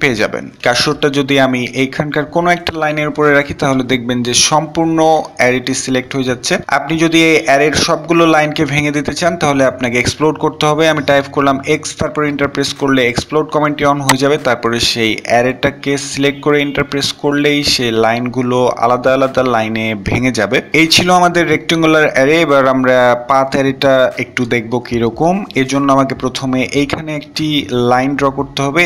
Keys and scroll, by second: 9.9 typing, 11.5 typing, 14.8 Return, 28.1 Return, 28.1 l.